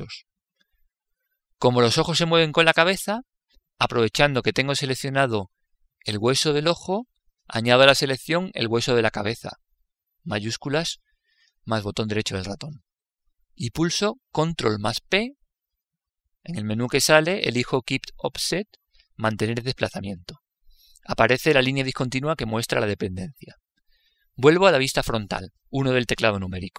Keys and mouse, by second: 0.8-6.1 middle drag, 12.3 right click, 15.9 ctrl+p, 25.6 KP_1, 26.3-26.7 middle drag.